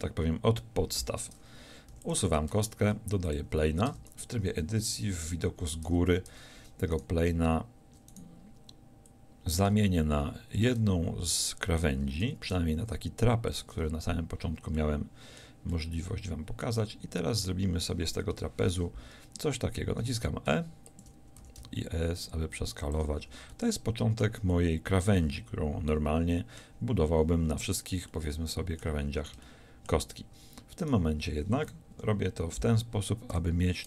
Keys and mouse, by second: 1.9 x, 2.5 shift+a, 3.9 Tab, 5.1 KP_7, 5.9 Tab, 6.3 Tab, 7.0-9.1 right drag, 12.3 s, 18.3 KP_1, 19.9 e, 21.4 s, 23.3 a, 28.1-32.0 drag, 32.0 KP_7, 33.3 e.